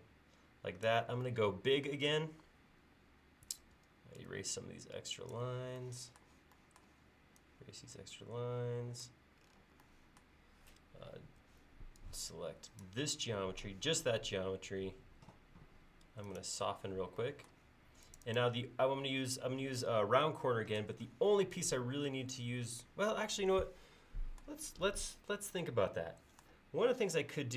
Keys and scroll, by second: 3.8 e, 11.5 space, 27.0 l.